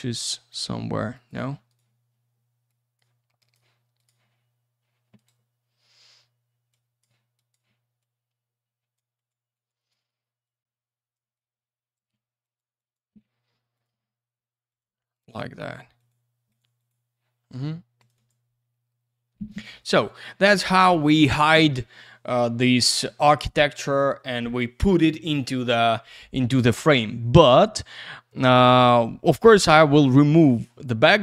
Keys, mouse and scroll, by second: 0.2 click, 1.1 click, 1.3 click, 1.7 right click, 1.8 double right click, 2.7 click, 3.4 click, 3.5 click, 4.0 click, 4.0 click, 5.2 right click, 5.2 right click, 6.7 click, 7.3 click, 7.5 click, 8.0 click, 9.2 click, 9.3 click, 9.5 click, 9.7 double click, 9.8 click, 9.9 click, 10.0 click, 10.1 double click, 10.1 click, 10.2 click, 10.4 click, 11.3 click, 12.4 click, 12.5 click, 12.8 click, 12.9 double click, 13.7 click, 13.8 click, 14.7 click, 14.8 click, 15.1 click, 15.2 click, 15.6 click, 15.7 double click, 15.9 click, 16.1 click, 16.5 click, 16.6 double click, 16.7 click, 16.9 click, 18.0 click, 18.0 click, 18.1 click, 18.3 click, 28.4 click, 28.5 click.